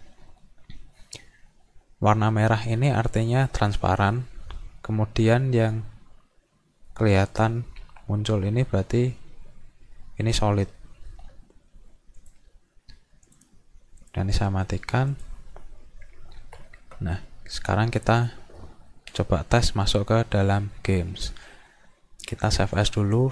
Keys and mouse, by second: 12.2 click, 13.3 click, 14.0 click, 15.1 click, 22.8 click.